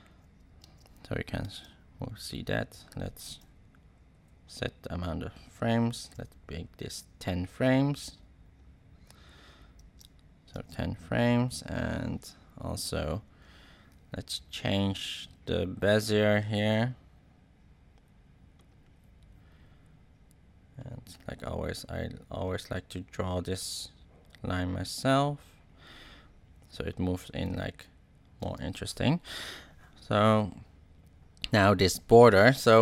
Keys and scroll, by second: 0.6 space, 4.1 shift+Right, 5.4 shift+Right, 9.7 space, 27.4 space.